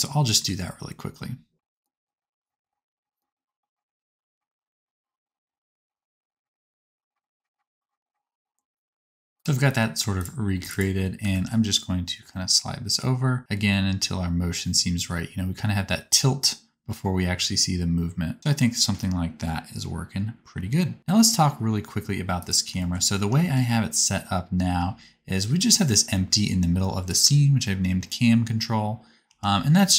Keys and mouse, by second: 7.5 click, 8.0 click, 8.6 space, 10.2 click, 10.6 middle click, 10.6 right click, 11.2 g, 21.0 space, 24.8 space, 25.2 g, 29.3 r.